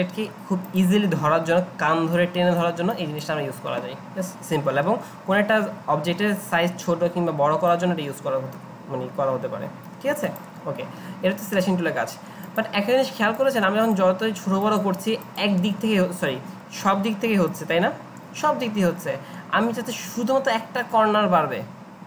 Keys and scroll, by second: 15.6 ctrl+z, 16.8 ctrl+z.